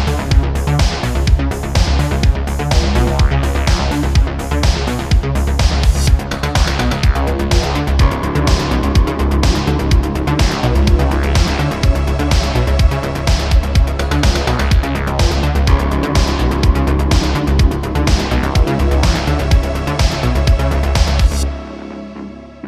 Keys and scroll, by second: 1.6 `, 6.7 Tab, 6.8 `.